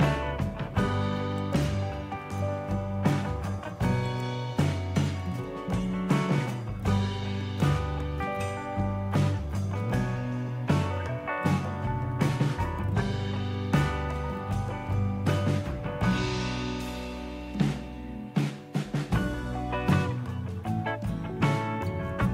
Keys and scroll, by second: 12.6 Return.